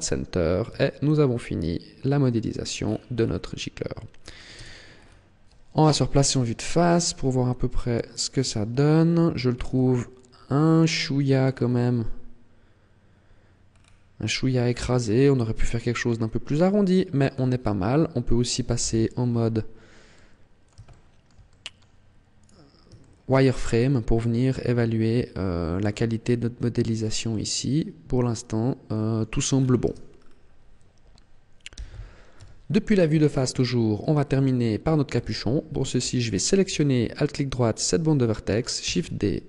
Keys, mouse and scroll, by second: 0.6 a, 1.0 middle click, 2.6-4.1 scroll down 10, 3.8-4.3 scroll up 5, 4.4 Tab, 4.8-5.2 scroll down 2, 5.7 KP_1, 6.4-6.8 scroll down 2, 7.1-7.7 scroll up 7, 8.0 shift+middle click, 8.4-9.0 scroll up 1, 9.6 Tab, 11.5 scroll up 2, 13.6-13.9 scroll down 4, 14.8 scroll down 4, 15.8 middle click, 16.4 scroll down 2, 17.0 scroll up 2, 18.8 z, 19.3-20.0 scroll up 5, 20.0 middle click, 20.9 shift+middle click, 21.4 middle click, 22.2 right click, 22.8 shift+middle click, 23.3 middle click, 29.4-30.2 scroll down 8, 29.7 Tab, 31.6 z, 32.2 KP_1, 33.1 shift+middle click, 33.8 scroll up 3, 34.7 scroll up 1, 35.0 Tab, 36.2 alt+right click, 38.7 shift+d.